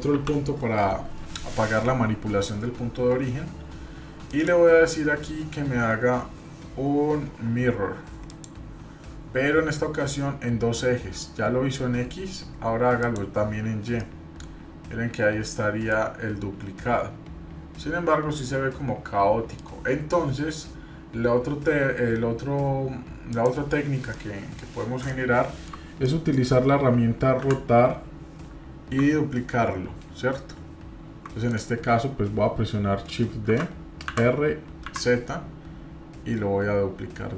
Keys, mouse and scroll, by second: 0.1 ctrl+., 4.3-8.6 drag, 13.0 click, 14.0-19.6 middle drag, 23.3 click, 24.1 middle click, 25.1 middle click, 25.7-26.1 scroll down 1, 26.1 middle click, 27.4 r, 33.5 shift+d.